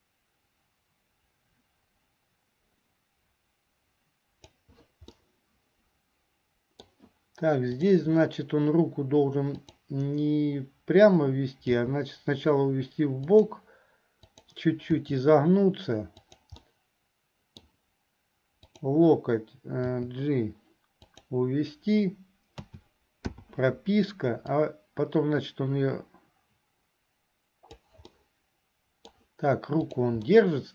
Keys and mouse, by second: 5.3-7.1 middle drag, 7.9 click, 9.6 click, 11.9 g, 15.2 r, 16.8 middle click, 18.7 click, 22.8 a, 23.6 i, 24.7-28.0 drag, 28.4 middle click, 30.0 click, 30.5 middle click.